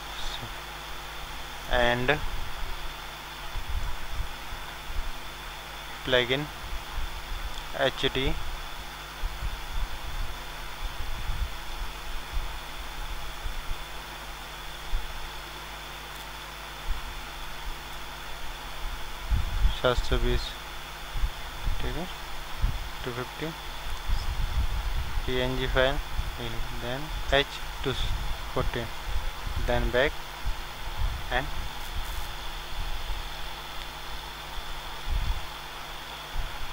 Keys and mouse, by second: 6.0-7.9 drag, 23.0-24.8 drag, 25.3-27.0 drag, 29.6-31.5 drag, 34.3 middle click, 35.0 right click, 35.6-36.7 middle drag.